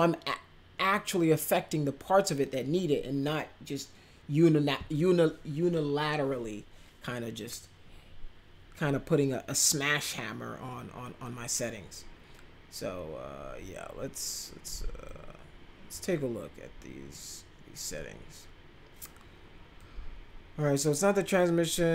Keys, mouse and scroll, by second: 15.0-15.9 drag, 19.8-21.9 drag.